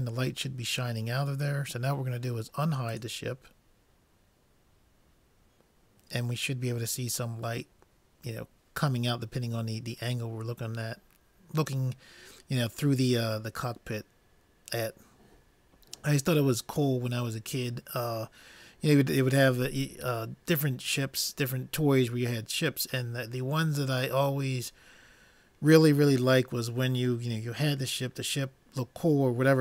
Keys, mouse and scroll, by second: 3.1 click, 3.5-4.9 drag.